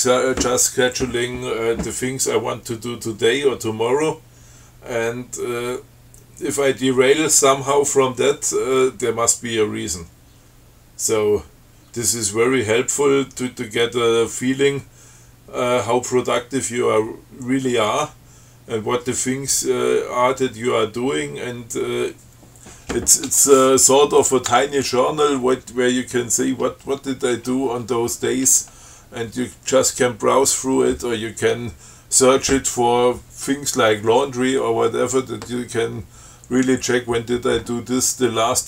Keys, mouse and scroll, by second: 24.5 click, 24.8 Tab.